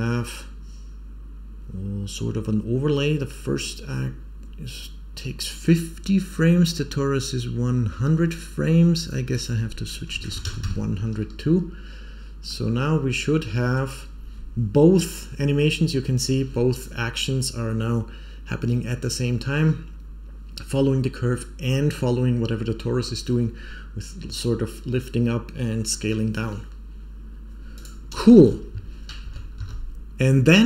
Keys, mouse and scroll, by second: 9.2-11.0 drag, 10.4 KP_0, 12.4-13.7 middle drag, 27.7 click, 28.3 space, 29.2 shift+Left, 29.5 shift+a.